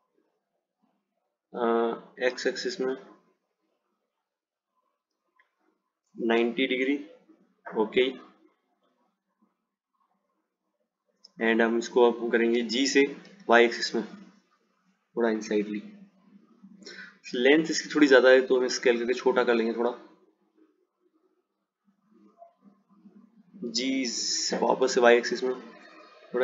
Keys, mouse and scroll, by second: 10.1 click, 10.5-13.2 drag, 13.2 g, 23.9 g.